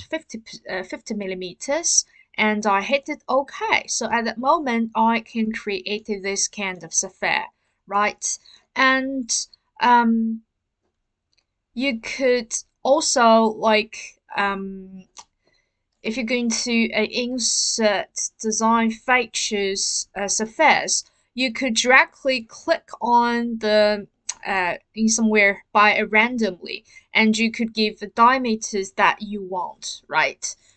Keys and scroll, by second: 0.0-0.2 typing, 2.3 typing.